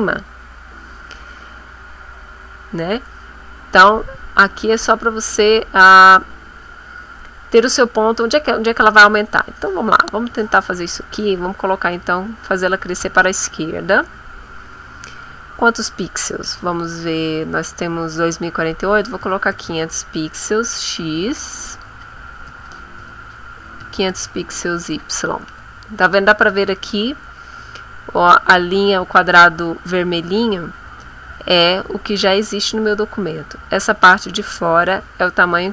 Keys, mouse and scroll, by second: 5.3 click, 9.6 click, 10.9 click, 12.1 click, 15.3 click, 19.2 5, 19.5 0, 22.5 Tab, 23.8 KP_5, 24.1 KP_0.